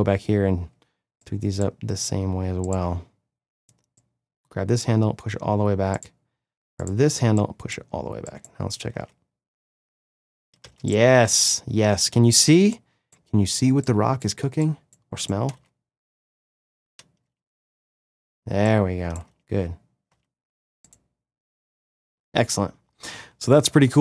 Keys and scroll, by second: 8.9 space, 15.5 space.